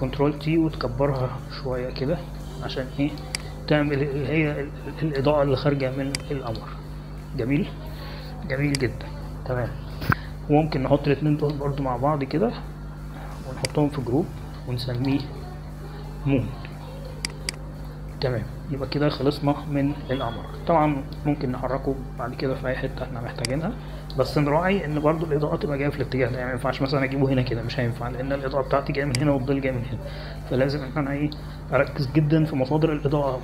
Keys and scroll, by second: 1.1 ctrl+t, 15.7 ctrl+g, 18.1-19.3 typing, 19.9 Return.